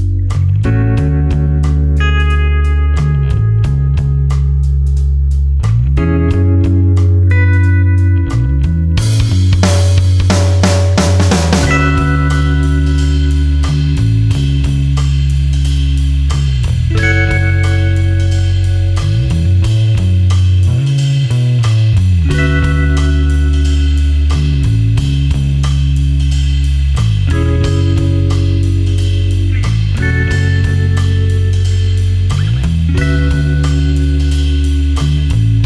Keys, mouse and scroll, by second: 1.4 click, 2.9 super+KP_Add, 4.7 super+KP_Subtract, 8.6 KP_Add, 10.4 super+KP_Subtract, 12.2 click, 12.7-13.1 scroll up 1, 13.8 click, 17.6-18.2 scroll up 1, 22.3 click, 25.2 super+KP_Add, 26.2 super+KP_Subtract, 27.8 click, 29.0 ctrl+click, 29.4 space, 30.0 click, 30.1 space, 30.6 ctrl+click.